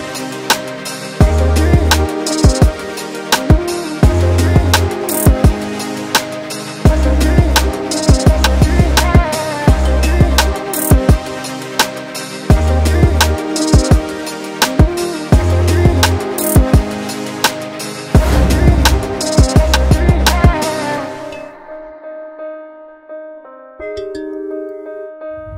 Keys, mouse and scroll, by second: 0.9-1.2 scroll down 4, 1.2 Tab, 1.7 alt+a, 1.9-2.3 scroll down 3, 2.3-4.2 middle drag, 4.2 click, 4.3 Tab, 5.7 click, 6.2 alt+a, 6.9-9.4 middle drag, 9.4 shift+click, 9.9 shift+click, 10.2 middle click, 11.1 scroll down 1, 11.4-12.6 middle drag, 12.6 click, 15.0 click, 19.4 scroll down 2, 19.5 middle click, 20.5-21.2 scroll up 1, 21.2 click, 21.8 scroll up 1, 21.9 middle click, 22.4 scroll up 4, 22.6 Tab, 23.0 middle click, 23.7 scroll up 3, 24.0 Tab, 24.6 alt+a, 25.3-25.5 drag.